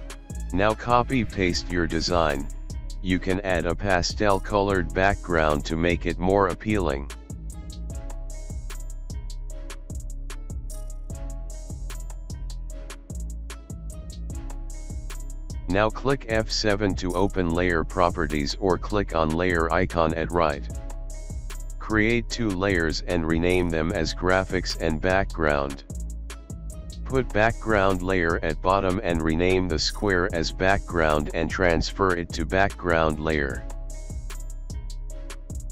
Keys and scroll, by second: 2.8 alt+space, 3.3 ctrl+g, 4.5 space, 16.2-16.8 typing, 26.0-27.6 typing, 32.7-34.5 typing.